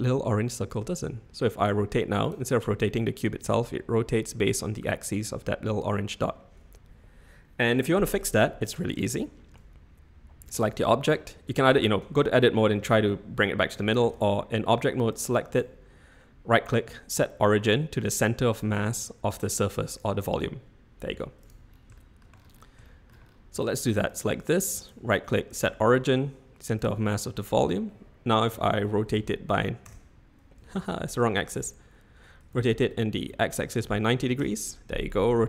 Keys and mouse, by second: 1.0 r, 3.3 r, 9.0-9.6 shift+middle drag, 11.7 Tab, 12.8 g, 13.7 Escape, 15.0 Tab, 15.1 click, 15.5-20.0 right drag, 21.1-21.5 typing, 21.9 shift+drag, 22.8 shift+middle drag, 24.9-26.9 right drag, 28.5 r, 30.7 Escape, 31.4 ctrl+z, 32.5 r, 35.3 r.